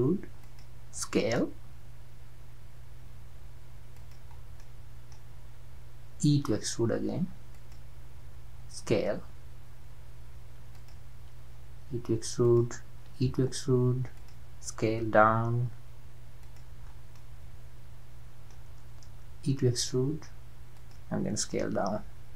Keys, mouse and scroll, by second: 1.1 s, 4.4 scroll down 2, 4.6-6.3 middle drag, 6.3 e, 8.6 s, 11.4 e, 13.1 e, 14.7 s, 16.9-17.2 scroll up 3, 17.2-19.5 middle drag, 19.5 e, 21.5 s.